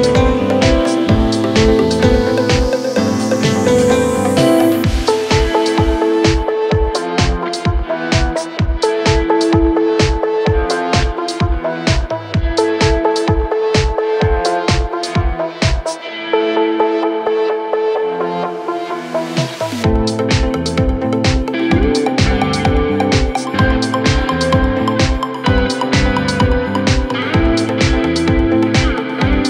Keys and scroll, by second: 11.6 ctrl+z, 21.4 ctrl+z.